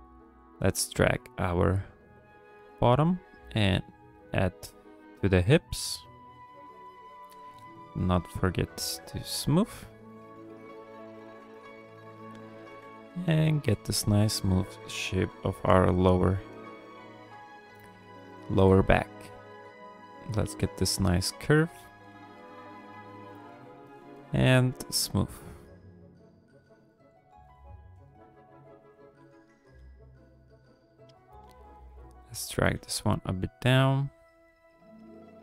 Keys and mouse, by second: 1.8 click, 2.5 f, 3.3 click, 4.2 f, 4.8 click, 5.5 f, 5.9 click, 6.5 click, 7.0 shift+click, 7.3 shift+click, 7.5 shift+click, 7.7 shift+click, 8.0 shift+click, 8.5 middle click, 9.0 shift+click, 9.2 shift+click, 9.7 middle click, 10.1 shift+click, 10.3 shift+click, 11.5 shift+click, 12.0 shift+click, 12.6 click, 12.9 ctrl+click, 13.2 click, 13.2 middle click, 13.6 shift+click, 13.9 shift+click, 14.1 shift+click, 15.2 KP_3, 16.0 ctrl+click, 16.6 shift+click, 16.9 g, 17.1 f, 17.9 click, 18.5 f, 19.2 click, 19.6 click, 20.0 click, 20.3 click, 20.7 click, 21.4 click, 22.1 f, 22.5 click, 23.0 f, 23.5 shift+click, 23.8 shift+click, 24.1 shift+click, 24.4 shift+click, 24.8 f, 25.4-26.4 drag, 26.6 f, 27.3 f, 28.0 click, 29.2 f, 29.8 f, 30.4 click, 30.9 f, 31.4 click, 31.8 click, 32.7 f, 33.1 click, 34.0 click, 34.9 click.